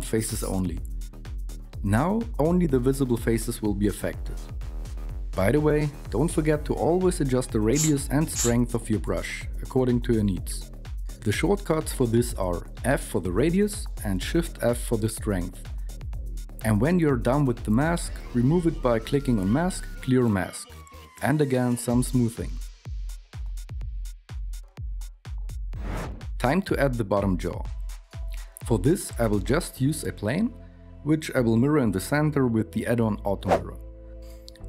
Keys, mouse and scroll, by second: 12.5 shift+middle click, 28.0 shift+a, 30.4 /, 31.2 KP_7, 31.6 s, 34.2 n.